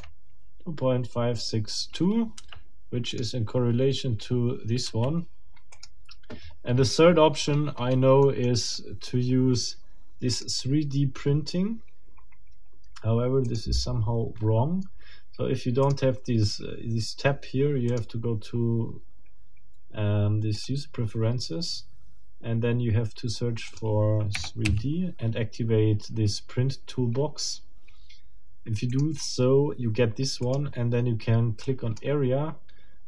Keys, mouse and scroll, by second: 0.0-0.3 shift+scroll up 2, 6.4-6.7 scroll down 2, 7.2-8.1 scroll down 6, 8.2 middle click, 8.6 scroll down 2, 8.8 middle click, 10.3 click, 13.4 click, 15.8 click, 17.9 click, 20.6 middle click, 23.7 middle click, 24.3 3, 24.6 d, 28.9 middle click, 30.4 middle click, 31.6 click.